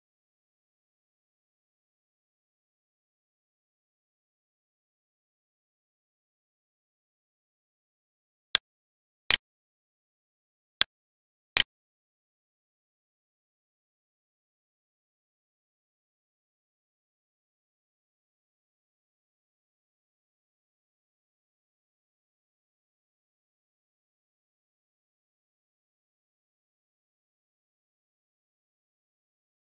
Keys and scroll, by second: 6.6 space, 12.6 space, 23.6 Right, 29.1 space.